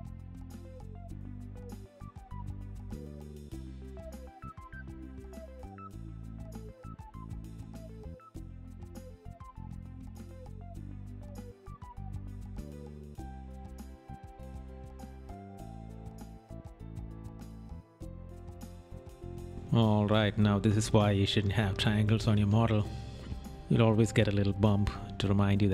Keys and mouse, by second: 1.8 right click, 3.7 right click, 5.3 right click, 6.3 right click, 6.8 right click, 8.2 right click, 8.8 right click, 9.3 right click, 10.1 right click, 10.8 right click, 12.0 right click, 12.9 right click, 15.1 right click, 18.6 right click, 21.4 right click.